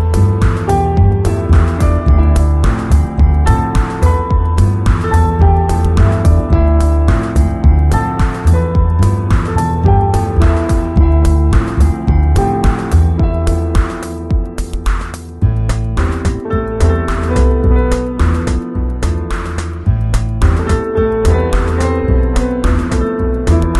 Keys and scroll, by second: 0.5 x, 1.2 ], 4.1 v, 4.7 alt+v, 6.3 2, 7.7 3, 17.5 super+z.